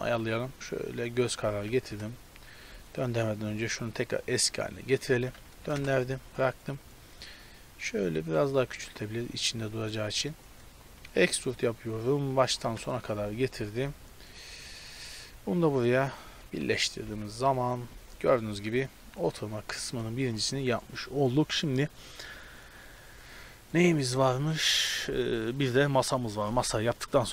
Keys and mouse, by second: 1.5 r, 3.8-5.8 drag, 5.3 r, 6.3 click, 6.7 z, 8.3 s, 9.6-12.4 drag, 11.1 e, 12.7 KP_Decimal, 12.9-14.1 middle drag, 14.7-16.1 drag, 16.5 click, 16.6 Tab, 17.1-19.7 middle drag, 17.2 a, 26.9-27.3 middle drag.